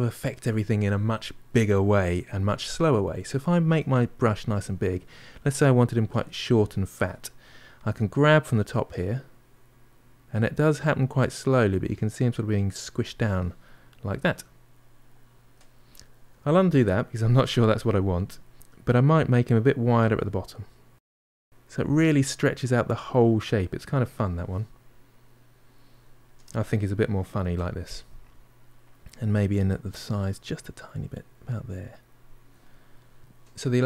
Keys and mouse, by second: 3.5 f, 4.5-5.9 middle drag, 5.9 f, 9.2-12.2 drag, 14.3-17.0 middle drag, 17.0 ctrl+z, 17.8-20.1 middle drag, 20.1-21.8 drag, 22.3-25.4 middle drag, 25.9-29.8 ctrl+middle drag, 29.8-32.5 drag, 32.5-33.8 middle drag.